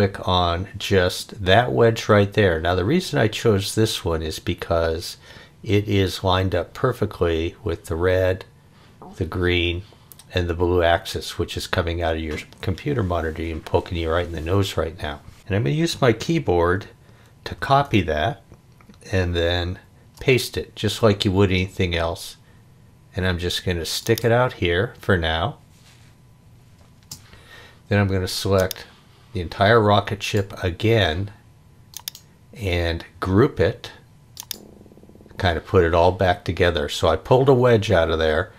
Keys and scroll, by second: 17.5 super+c, 19.8 super+v, 26.7 space.